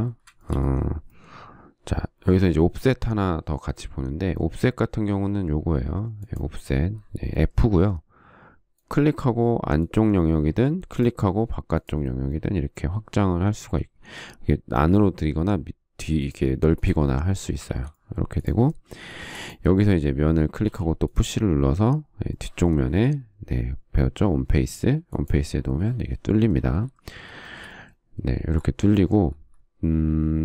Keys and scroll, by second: 0.8 ctrl+z, 14.5 ctrl+z, 18.4 ctrl+z, 19.9 space, 21.3 p.